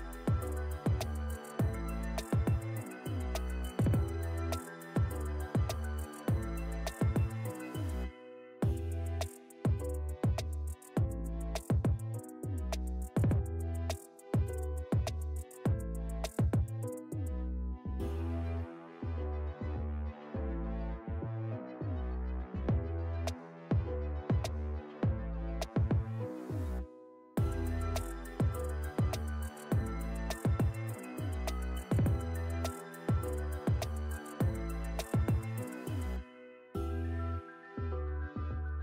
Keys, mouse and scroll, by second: 1.7-2.3 shift+drag, 5.8-8.0 typing, 9.9 click, 11.8-12.4 shift+drag, 17.6 Down, 18.6 Up, 19.5 click, 22.2 Down, 23.6 click, 25.1 scroll down 1, 26.0 click, 32.3 click, 33.9 ctrl+a, 34.0-37.1 typing, 38.0 Down, 38.3 Return.